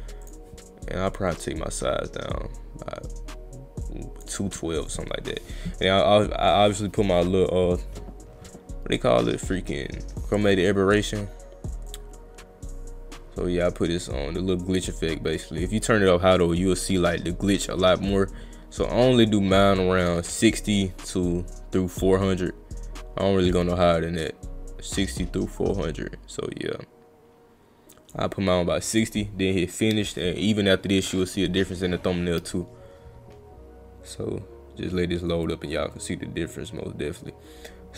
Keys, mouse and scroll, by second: 0.2 click, 1.4-4.2 drag, 4.9 click, 11.9-17.1 drag, 18.1-19.8 drag, 21.7-28.1 drag, 29.0 click.